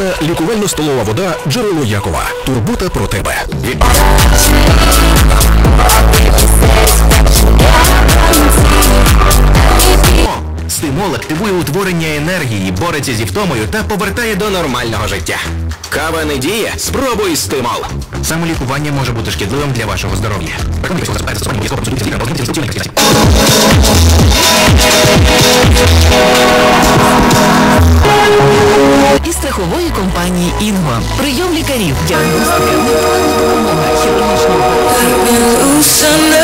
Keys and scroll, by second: 10.1 Page_Down, 29.1 Page_Down.